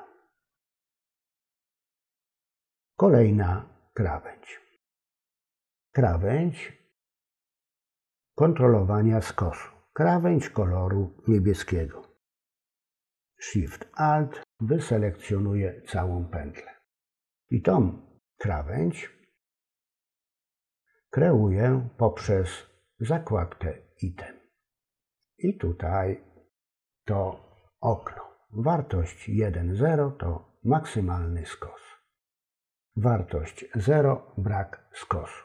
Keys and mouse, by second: 1.3 ctrl+z, 5.1 click, 13.5 alt+shift+click, 31.4-33.2 drag.